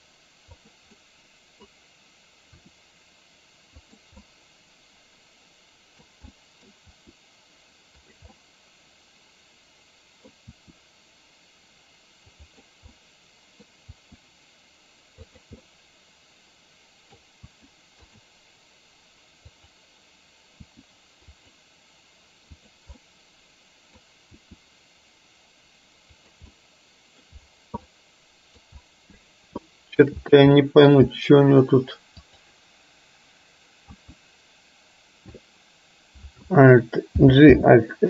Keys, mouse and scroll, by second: 0.6 click, 1.1-1.8 middle drag, 2.6 r, 4.3-6.1 middle drag, 6.4 middle click, 7.0 r, 8.4-10.4 middle drag, 10.6 r, 13.0 middle click, 14.0 r, 15.8-17.3 middle drag, 17.5 r, 19.6 click, 23.0-24.1 middle drag, 24.4 r, 26.6-27.4 middle drag, 28.0-28.6 middle drag, 29.8-30.1 shift+middle drag, 30.8 middle click, 32.4 click, 34.0 KP_3, 37.3 alt+g, 37.5 alt+r.